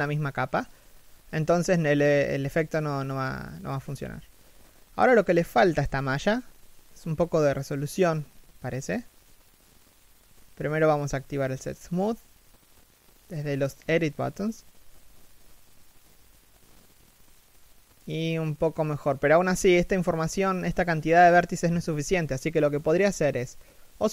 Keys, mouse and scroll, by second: 0.5 middle click, 2.2-2.9 scroll down 1, 5.9 shift+t, 6.2 middle click, 7.3 right click, 12.1 middle click, 17.7 middle click, 19.2 middle click.